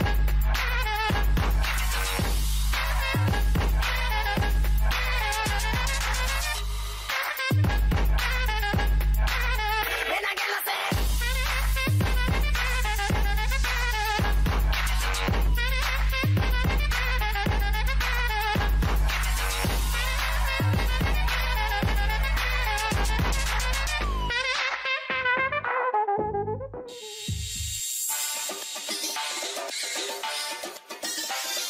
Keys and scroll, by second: 6.4 ctrl+BackSpace, 7.5 ctrl+d, 13.1 ctrl+BackSpace, 14.3 ctrl+d, 16.2 ctrl+0, 22.8 ctrl+g, 25.2 ctrl+z.